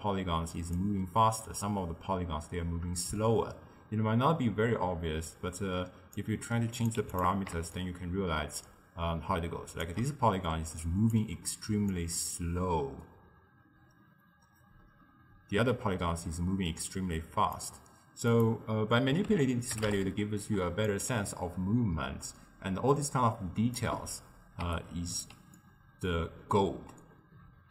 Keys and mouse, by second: 3.2-6.3 shift+drag, 6.8 click, 7.8-10.4 shift+drag, 10.4 d, 10.5 click, 11.2 d, 11.3 d, 11.9-15.1 shift+drag, 18.4-23.9 drag, 24.7 d, 24.8 right click, 25.3 d, 25.6-27.7 middle drag.